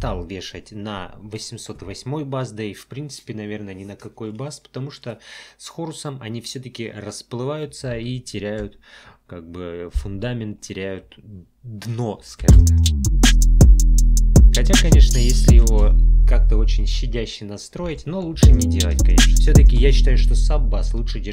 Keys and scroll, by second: 12.4 space, 15.7 space, 18.3 space.